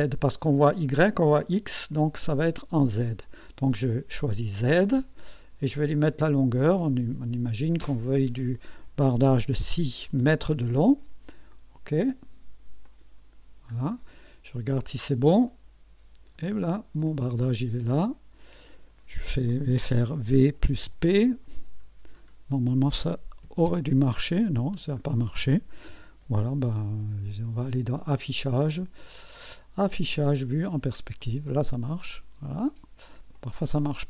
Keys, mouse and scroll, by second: 4.3 click, 7.8 click, 9.4 6, 9.8 0, 12.9 click, 13.8-14.4 scroll down 2, 15.5 click, 17.1-19.1 drag, 20.3 v, 20.9 p, 21.8-22.4 scroll down 4, 23.2-24.2 typing, 24.8-25.1 scroll down 2, 25.6 v, 25.9 p, 28.0 click, 30.7 click, 31.5 scroll up 1, 32.2 click, 33.4 click.